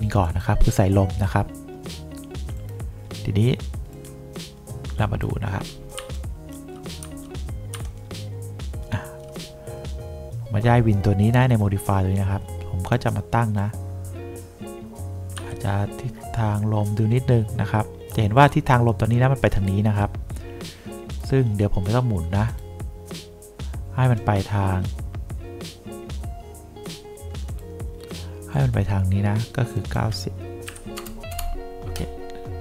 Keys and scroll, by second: 6.1 3, 15.5 F2, 30.8 9, 31.1 0, 31.4 Return.